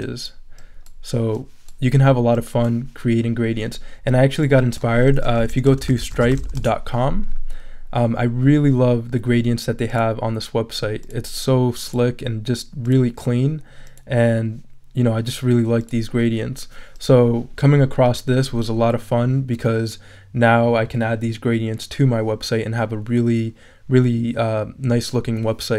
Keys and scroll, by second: 5.1-6.9 typing.